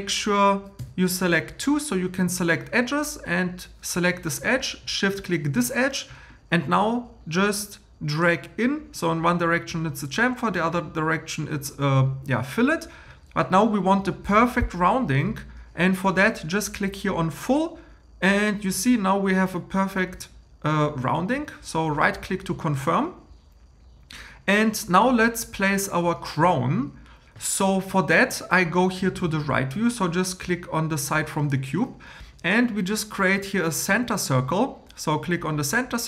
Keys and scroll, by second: 0.8 2.